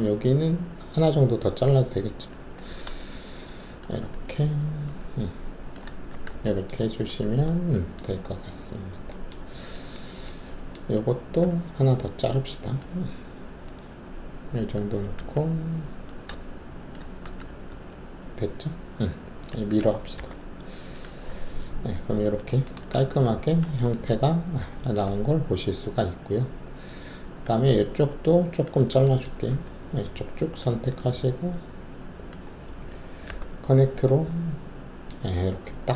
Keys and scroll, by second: 2.3 alt+s, 6.1 shift+w, 8.1 alt+`, 11.4 alt+1, 15.1 alt+s, 17.2 shift+w, 17.7 alt+`, 20.1 ctrl+e, 22.9 alt+shift+q, 29.4 alt+3, 33.2 alt+t, 35.6 w.